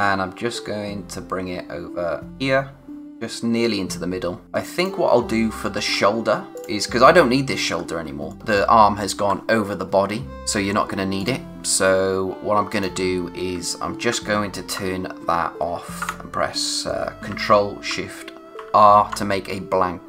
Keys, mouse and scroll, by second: 5.2-6.1 scroll up 1, 6.5 click, 6.9-7.2 scroll down 1, 8.1 space, 8.3 click, 8.4-9.8 scroll up 1, 18.5 alt+shift+r.